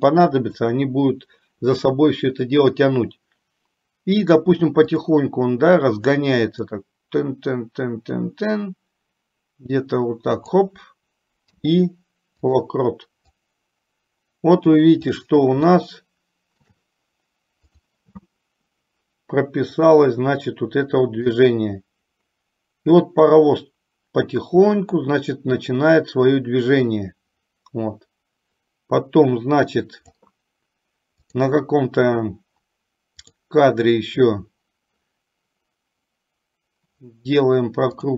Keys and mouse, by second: 5.1 click, 6.8-10.9 drag, 13.5-14.9 drag, 15.9-16.9 shift+middle drag, 19.9 click, 21.4-30.4 drag, 31.4 click, 33.3 click.